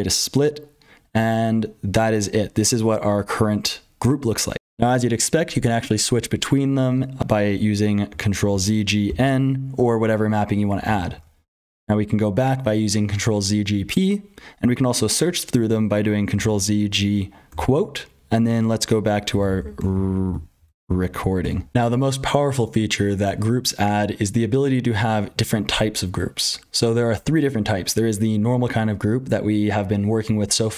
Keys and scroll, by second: 0.0-30.7 typing, 4.6 F12, 10.8 ctrl+z, 16.3 ctrl+z.